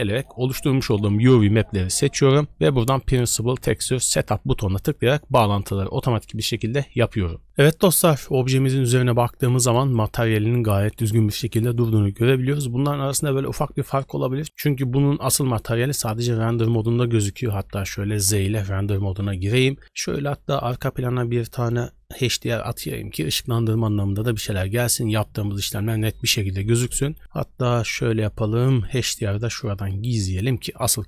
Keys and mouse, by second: 8.2-8.9 middle drag, 9.5 shift+drag, 9.9-10.4 drag, 10.4 middle click, 10.9 shift+middle drag, 11.7 shift+drag, 16.7 click, 17.9 z, 19.1 click, 20.3-20.6 drag, 22.3 click, 28.8 click, 30.1 click, 31.0 drag.